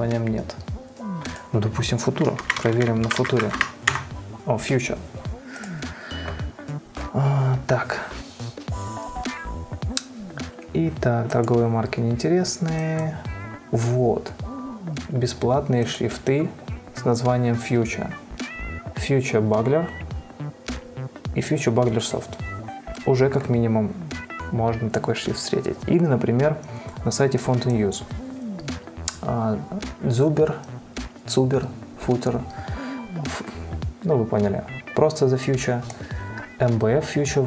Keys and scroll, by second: 2.4-4.1 typing, 4.2 Return.